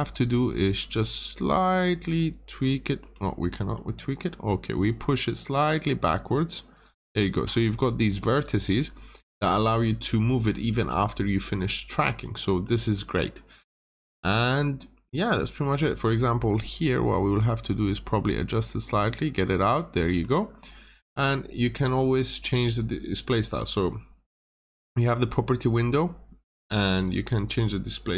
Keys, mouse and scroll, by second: 0.5 click, 2.9 Escape, 3.4 middle click, 4.6 click, 7.3 scroll up 1, 7.6 Escape, 8.2 click, 8.6 double click, 9.5 scroll down 1, 9.9 middle click, 10.2 scroll down 1, 10.6 middle click, 11.5 scroll up 1, 12.4 Escape, 12.8 scroll down 1, 13.3 middle click, 13.5 scroll down 1, 14.0 middle click, 14.4 scroll up 1, 16.0 click, 16.4 scroll up 1, 17.5 click, 19.3 scroll up 1, 20.0 scroll up 1, 20.0 Escape, 20.4 scroll down 1, 22.6 click, 22.9 double click, 27.0 click, 27.4 double click.